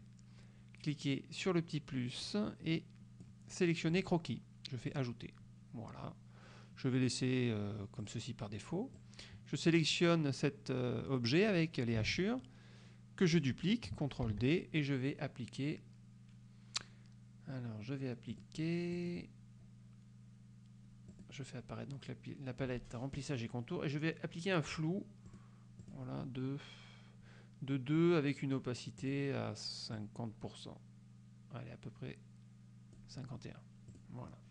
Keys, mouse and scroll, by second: 2.4-3.5 drag, 4.1 click, 5.0 click, 8.1 click, 9.1-11.8 drag, 12.2 ctrl+z, 14.4 ctrl+d, 18.4 click, 19.1 click, 21.2 click, 25.4 click, 25.9 click, 29.1 click, 30.0-33.3 drag, 34.0 click.